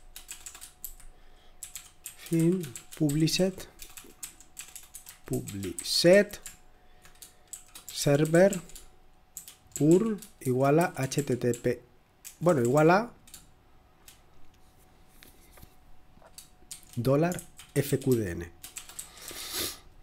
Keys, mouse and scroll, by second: 0.0-6.0 typing, 7.5-12.7 typing, 16.6-19.3 typing.